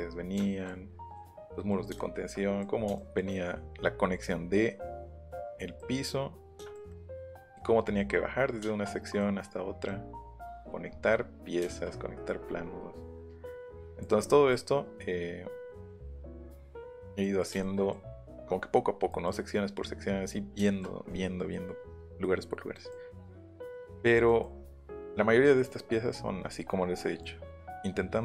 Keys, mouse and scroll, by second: 0.4 shift+middle click, 0.9 middle click, 1.9 shift+middle click, 2.9 shift+middle click, 3.8 middle click, 5.8 middle click, 12.7 middle click, 17.8 middle click, 19.1 middle click, 20.6 shift+middle click, 22.2 middle click, 23.0 middle click, 25.9 middle click, 26.6 middle click, 27.0 middle click.